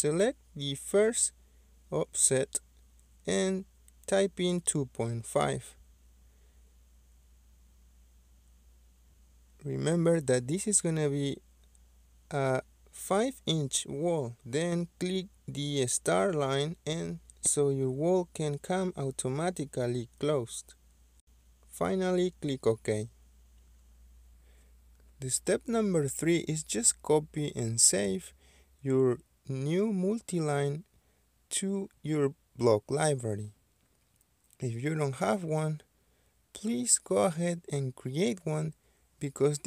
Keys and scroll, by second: 1.7-3.0 typing, 7.4-8.3 typing.